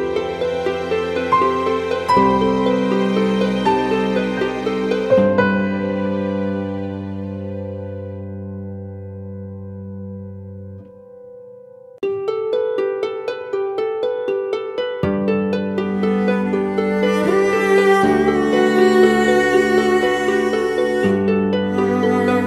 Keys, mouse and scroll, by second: 0.5 ctrl+-, 0.7 ctrl+-, 0.9 ctrl+-, 1.1 ctrl+-, 1.4 ctrl+-, 6.8 alt+scroll up 1, 21.1-21.9 scroll up 1, 22.2 ctrl+t.